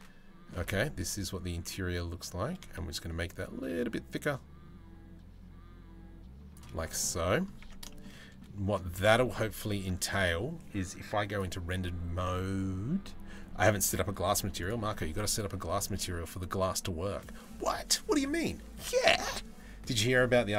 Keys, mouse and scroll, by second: 1.3 middle click, 6.6 middle click, 7.2 Tab, 7.7 middle click, 9.8 ctrl+s, 14.2 click.